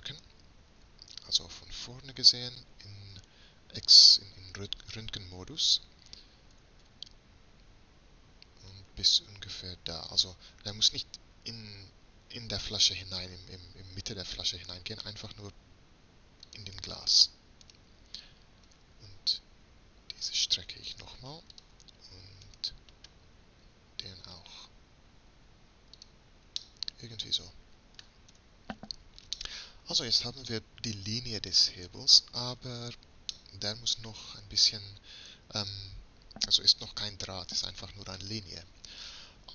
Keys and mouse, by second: 1.0 KP_3, 2.6 z, 6.6 g, 17.8-19.7 drag, 18.8 s, 22.6-24.4 drag, 23.8 s, 28.4 Tab, 31.0-31.5 middle drag, 32.1 z.